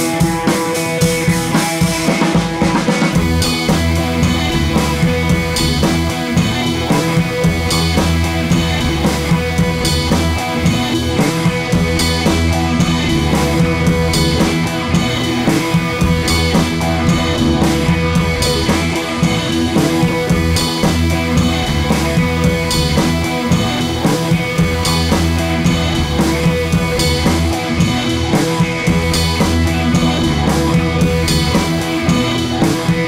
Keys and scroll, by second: 7.1 Page_Up, 21.2 d, 27.3 Home, 27.4 Left, 27.6 Up, 28.0 Up, 29.1 super+c, 29.2 super+v.